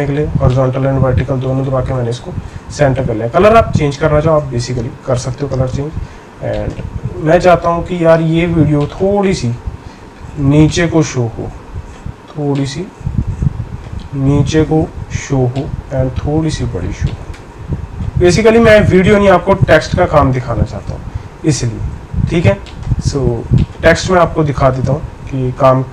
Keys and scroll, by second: 22.8 shift+8.